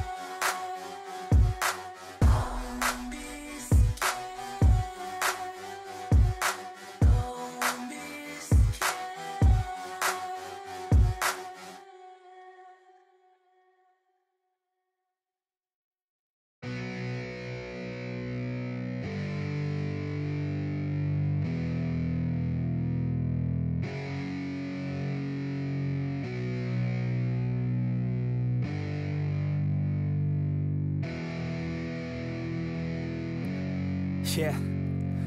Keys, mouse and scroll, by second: 0.1 double click, 2.2 ctrl+d.